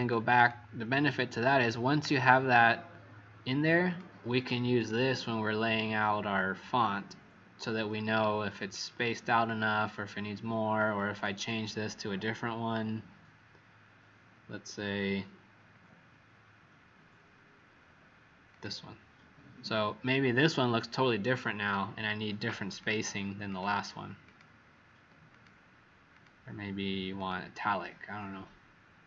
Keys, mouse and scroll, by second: 0.3 click, 1.5 click, 8.5 click, 9.4 click, 9.7 click, 11.1 click, 15.5-16.4 scroll up 2, 16.4-17.7 scroll up 1, 18.4 click, 23.4 click, 24.2 click.